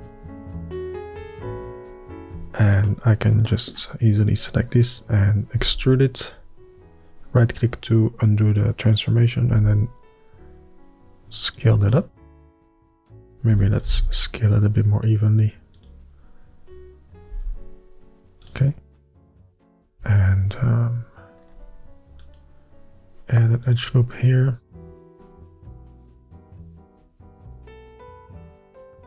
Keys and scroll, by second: 6.3 e, 10.2 s, 14.3 s, 14.6 y, 20.6 ctrl+r, 27.5 F3.